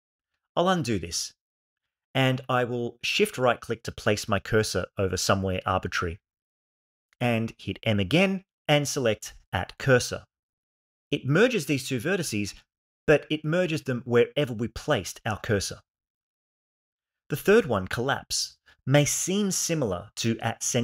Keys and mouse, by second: 1.2 ctrl+z, 3.3 shift+click, 7.3 m, 17.7 m.